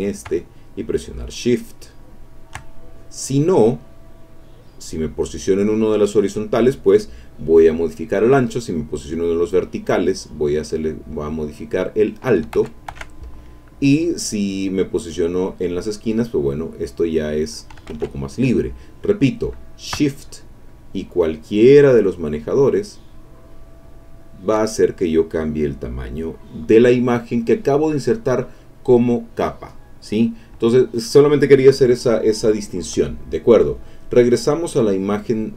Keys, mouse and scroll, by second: 3.5-5.0 drag, 9.5-12.4 drag, 12.5 ctrl+z, 14.9-17.8 drag, 17.9 ctrl+z, 17.9-20.0 ctrl+drag, 20.7 shift+click, 21.4-22.6 shift+drag, 23.1-24.6 shift+drag, 30.9 click, 33.6 click, 34.4-35.5 drag.